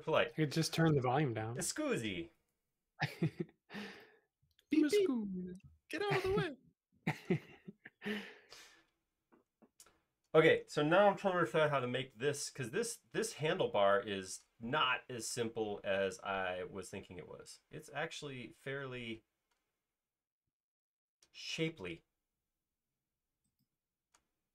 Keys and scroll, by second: 2.3 |, 5.2 space.